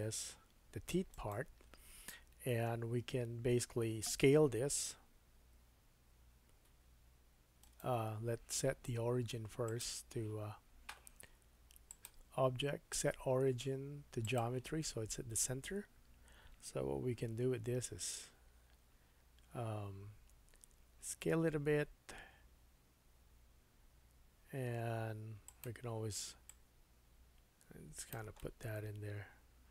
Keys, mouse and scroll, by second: 5.4 s, 9.7-25.6 drag, 17.9 s, 25.6 middle click, 26.5-29.7 drag, 28.4 middle click.